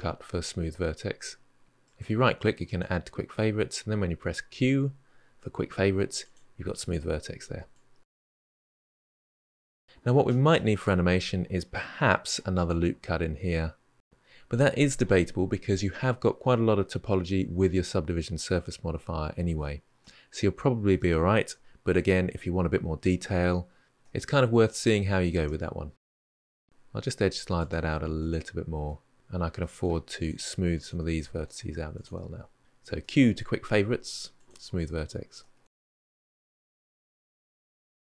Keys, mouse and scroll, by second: 3.8 q, 7.5-8.3 drag, 8.3-9.3 middle drag, 11.9 ctrl+r, 14.2-15.2 middle drag, 19.8-21.9 middle drag, 21.9-22.4 scroll down 1, 22.4-23.5 middle drag, 23.9-24.4 middle drag, 24.4 Tab, 24.5 scroll down 3, 24.7-25.1 middle drag, 25.1 Tab, 25.2-26.1 scroll up 5, 26.1 g, 27.6-30.7 middle drag, 30.7 click, 31.1 shift+click, 31.4-32.0 middle drag, 32.0 shift+click, 33.6 q, 35.3 middle click, 35.6 Tab, 35.7 scroll down 1, 35.8-36.2 middle drag, 36.2 Tab, 36.3-36.8 middle drag, 36.8 click, 37.0 g, 37.3 Tab, 37.4 middle drag, 37.6 scroll down 3, 37.8-38.1 middle drag, 38.1 scroll up 1.